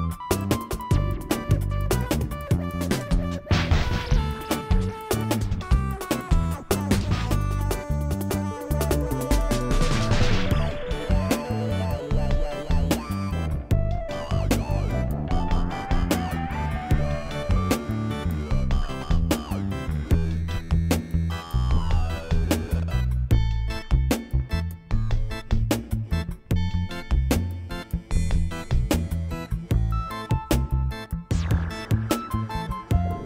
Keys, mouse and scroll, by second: 0.3 click, 0.9 ctrl+z, 0.9 click, 1.4 r, 1.9 click, 2.1 click, 3.0 KP_7, 3.4 Tab, 3.6 ctrl+a, 4.0 Tab, 4.4 Tab, 4.7 click, 5.0 KP_1, 5.5 r, 7.4 middle click, 7.7 middle click, 7.9 middle click, 8.2 middle click, 8.5 g, 9.7 shift+g, 9.8 shift+click, 10.1 click, 10.5 g, 11.2 g, 11.8 click, 12.2 ctrl+a, 14.4 g, 15.0 ctrl+a, 16.7 ctrl+a, 17.2 g, 17.6 click, 18.0 click, 18.7 r, 19.3 KP_1, 20.0 click, 20.8 shift+click, 21.2 shift+click, 21.4 click, 21.7 r, 23.3 click, 23.9 r, 25.4 click, 26.0 g, 26.7 click, 27.2 g, 28.2 ctrl+a, 28.3 click, 29.1 ctrl+a, 29.8 ctrl+a, 30.2 click, 30.4 click, 30.6 click, 30.9 g, 31.4 click, 31.7 shift+click, 32.1 g, 33.0 ctrl+a.